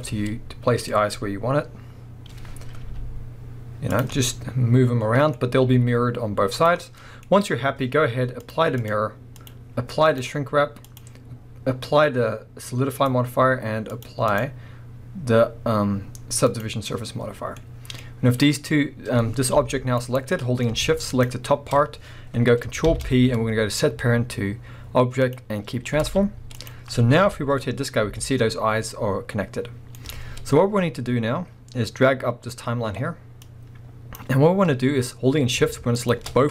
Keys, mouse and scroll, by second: 0.0 click, 0.9-2.8 scroll down 2, 2.8 g, 4.0 click, 4.2-6.7 middle drag, 5.7 g, 6.7 click, 6.8-7.3 middle drag, 7.2 scroll up 2, 8.4 click, 8.8-9.5 drag, 10.1-11.0 drag, 13.0-14.1 drag, 14.3 click, 16.5-17.6 drag, 17.2-17.6 scroll down 1, 17.6-20.2 middle drag, 18.0-18.4 scroll up 2, 18.4 scroll down 2, 19.5 g, 20.2 right click, 20.3-21.1 middle drag, 21.1 shift+click, 22.8 ctrl+p, 25.7 scroll down 1, 26.0 alt+a, 26.5 click, 27.2 KP_1, 27.8 scroll up 1, 28.0 r, 30.1 right click, 30.3 scroll down 1, 33.4-36.1 drag, 34.5-35.9 scroll up 1.